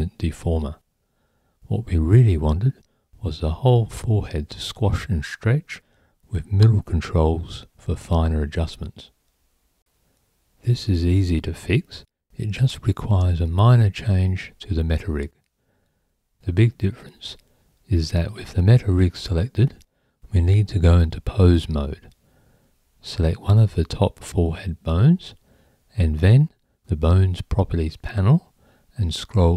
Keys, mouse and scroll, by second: 0.4 click, 4.7 click, 8.8-10.4 right drag, 10.4 Tab, 13.8 click, 15.6 click, 17.9 click, 19.5 click.